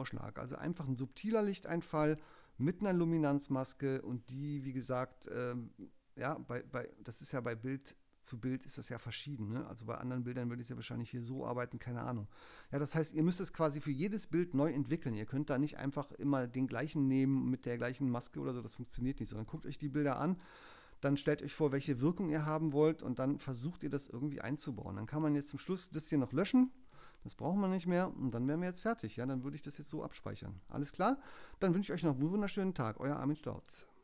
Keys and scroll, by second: 26.9 BackSpace, 29.9 super+s.